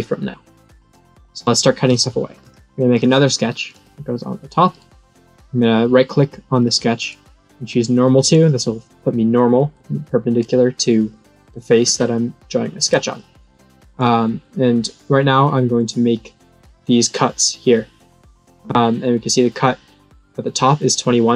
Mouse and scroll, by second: 2.4 click, 2.9 click, 3.6 click, 4.7 right click, 6.6 click, 6.9-8.2 right drag, 8.2 click, 9.9 middle click, 12.1 middle click, 15.7 click.